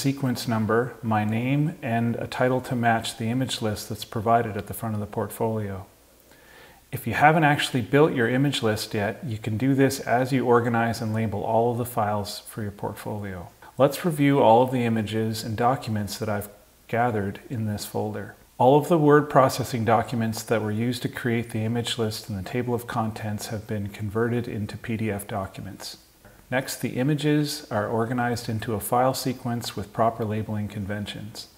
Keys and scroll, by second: 0.5 Down.